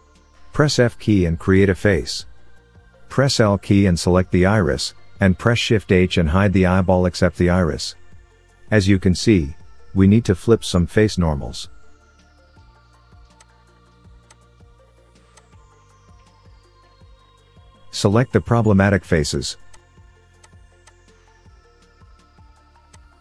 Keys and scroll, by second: 0.9 f, 4.4 l, 7.3 shift+h.